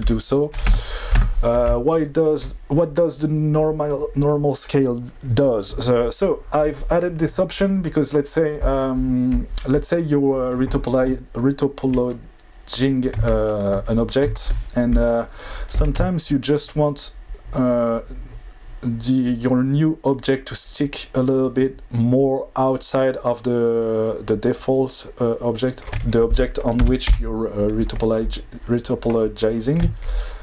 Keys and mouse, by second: 0.0 click, 0.7 Tab, 1.1 Tab, 2.0 drag, 16.7-25.8 shift+drag, 26.0-27.1 drag, 30.0-30.4 shift+drag.